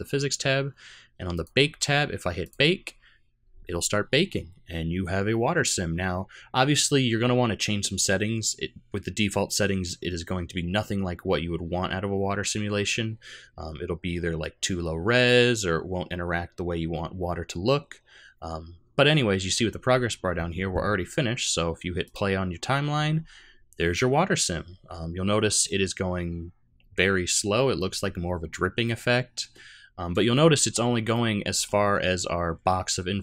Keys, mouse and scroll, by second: 1.3 click, 1.7-2.4 scroll down 2, 2.4 click, 22.0 click, 31.1 middle click.